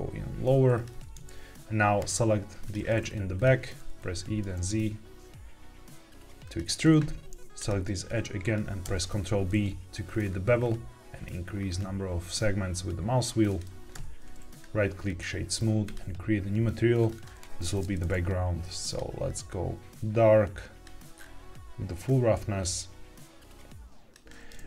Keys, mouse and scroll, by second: 0.7 click, 0.9 Tab, 2.5 click, 3.3 click, 3.9 e, 3.9 z, 6.3 click, 7.5 click, 8.7 ctrl+b, 10.0-11.3 scroll up 5, 11.5-12.0 scroll up 3, 13.4 click, 13.9 Tab, 14.4 right click, 15.8 click, 16.9 click, 17.1-17.8 drag, 18.8 click, 21.0-21.8 scroll down 2, 22.0-24.1 drag.